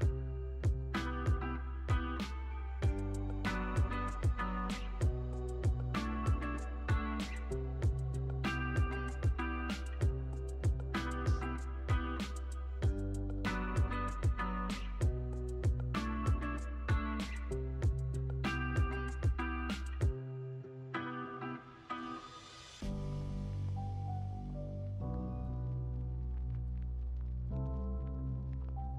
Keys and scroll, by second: 4.3 x, 5.0 space, 8.5 x, 9.8 super+c, 10.0 super+v, 10.7 super+c, 10.9 super+v, 11.6 x, 13.3 super+c, 13.6 super+v, 14.2 super+c, 14.4 super+v, 15.5 x, 16.2 space.